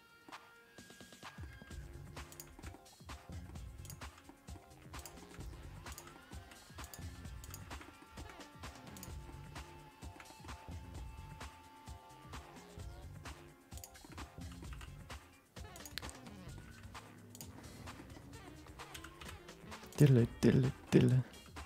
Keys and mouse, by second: 0.4-1.4 middle drag, 2.2 g, 2.8 middle click, 3.8 click, 4.2 middle click, 4.6 g, 5.4 middle click, 5.9 click, 6.1 middle click, 6.4 r, 7.0 g, 7.9 middle click, 8.2 middle click, 8.5 middle click, 8.9 click, 9.2 middle click, 10.0 shift+middle click, 10.2 middle click, 10.9-13.2 middle drag, 13.7 click, 14.0 shift+middle click, 14.1 middle click, 14.7 e, 16.1 middle click, 16.6 g, 17.5 middle click, 18.1 middle click, 18.9 r, 20.2 middle click, 21.0 middle click, 21.3 g.